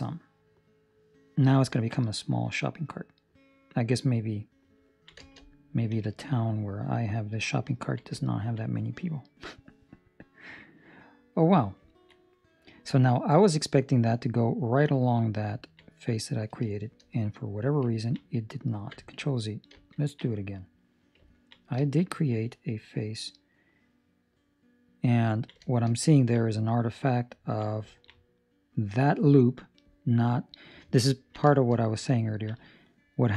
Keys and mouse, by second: 1.6 ctrl+middle click, 1.9 middle click, 4.9 ctrl+middle click, 5.9 KP_3, 6.5 ctrl+middle click, 7.5 ctrl+middle click, 8.1 ctrl+middle click, 8.6 middle click, 11.8 ctrl+middle click, 12.3 middle click, 15.5 ctrl+middle click, 15.7 middle click, 16.7 shift+middle click, 17.1 middle click, 18.0 ctrl+middle click, 18.2 middle click, 19.7 ctrl+z, 20.5 middle click, 21.2 ctrl+middle click, 21.8 shift+middle click, 22.5 middle click, 23.9 middle click, 25.2 ctrl+middle click, 25.3 ctrl+middle click, 25.5 shift+middle click, 25.7 shift+middle click, 26.2 ctrl+middle click, 26.6 middle click, 28.0 ctrl+middle click, 28.2 middle click, 31.1 ctrl+middle click, 31.4 shift+middle click, 31.7 middle click, 32.3 ctrl+middle click.